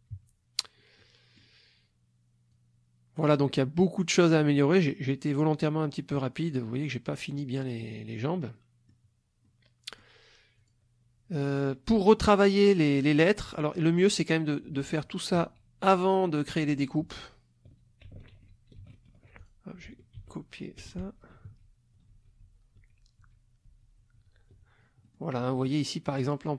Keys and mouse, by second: 0.1 KP_Subtract, 1.0 middle click, 2.5-3.4 drag, 4.2 middle click, 7.8-9.1 drag, 9.4 click, 10.5 click, 11.6 click, 14.0 ctrl+click, 14.8 ctrl+z, 18.4 ctrl+shift+z, 19.3 ctrl+shift+click, 20.2 ctrl+x, 21.5 ctrl+shift+z, 25.1 ctrl+click, 26.1 click.